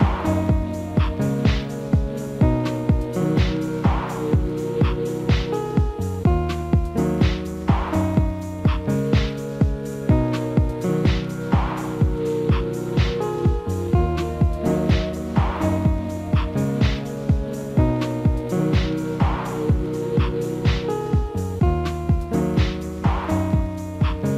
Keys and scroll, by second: 19.1 F4.